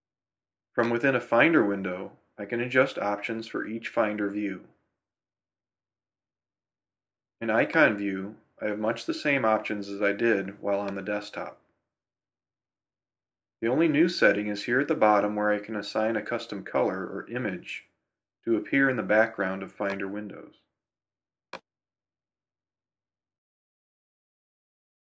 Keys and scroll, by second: 3.4 super+j.